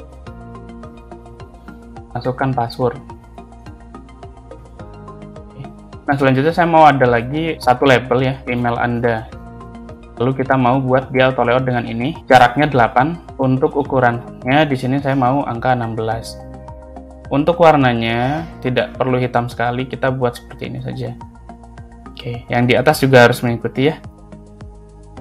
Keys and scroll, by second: 0.5-1.3 typing, 2.2 ctrl+Left, 3.3 ctrl+Right, 3.7 Left, 4.5 k, 7.5 ctrl+v, 8.4-10.1 typing, 11.5 shift+a, 12.2 8, 12.3 Return.